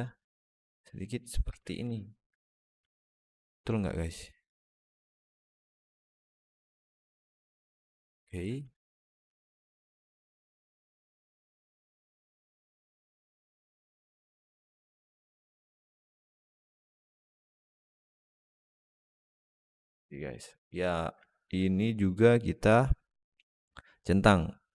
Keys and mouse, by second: 1.4 Tab, 1.8 alt+middle drag, 2.7-3.4 alt+middle drag, 8.6 alt+middle drag, 9.1 Tab, 10.0 alt+middle click, 10.5-11.8 drag, 11.9 shift+click, 12.3 click, 13.3 Tab, 13.6-14.6 alt+middle drag, 15.0 Tab, 15.9 click, 16.7 alt+middle click, 17.0 Tab, 17.4-17.8 alt+middle drag, 17.9 click, 18.4-19.3 alt+middle drag, 19.4 alt+shift+middle click, 20.3 click, 21.1 alt+shift+middle drag, 24.4 click.